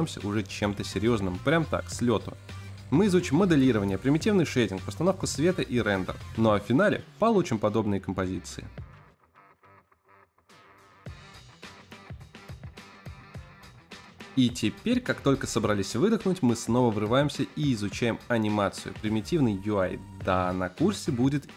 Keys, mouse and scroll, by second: 0.0-0.3 typing, 0.0 shift+middle click, 0.1 middle click, 0.3 shift+middle click, 0.4 Tab, 0.4 middle click, 0.5 shift+middle click, 0.7 click, 0.8 Tab, 0.8 ctrl+r, 0.8 shift+middle click, 0.8 scroll up 2, 1.1 ctrl+r, 1.3 shift+middle click, 1.5 ctrl+Tab, 1.5 middle click, 1.5 scroll up 2, 1.5 ctrl+r, 1.8 shift+middle click, 1.8 scroll down 4, 1.9 middle click, 1.9 scroll up 4, 1.9 shift+middle click, 2.0 Tab, 2.0 middle click, 2.1 ctrl+r, 2.2 Tab, 2.3 middle click, 2.3 scroll down 1, 2.5 click, 2.5 g, 2.7 z, 3.0 r, 3.2 g, 3.3 middle click, 3.4 click, 3.6 scroll down 1, 3.8 middle click, 4.0 click, 4.3-5.9 typing, 4.8 middle click, 5.2 shift+middle click, 5.2 scroll up 4, 5.3 click, 5.4 click, 5.5 click, 5.5 Tab, 5.5 click, 5.7 click, 5.9 shift+middle click, 5.9 click, 5.9 scroll up 2, 6.1 middle click, 6.1 scroll down 1, 6.3 Tab, 6.4 click, 6.5 click, 6.8 click, 6.9 Tab, 7.0 click, 7.1 middle click, 7.4 click, 7.5 middle click, 7.7 ctrl+KP_Add, 7.9 ctrl+KP_Add, 8.0 click, 8.1 click, 14.6 click, 18.4 click, 18.4 middle click, 18.4 scroll up 5, 18.6 click, 18.7 shift+middle click, 18.8 click, 19.0 click, 19.2-21.5 typing, 19.4 click, 20.3 click, 21.1 click, 21.5 click.